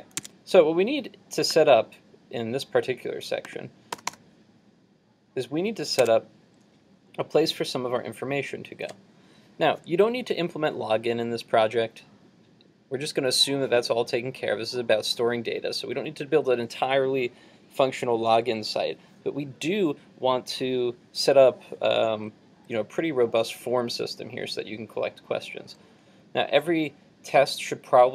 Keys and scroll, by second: 0.3 super+Tab, 6.0 super+Tab.